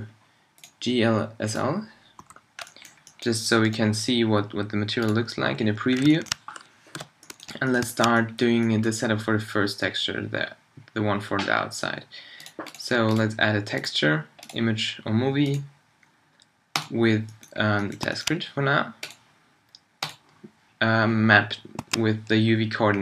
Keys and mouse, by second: 2.2 n, 6.0 click, 6.9 t.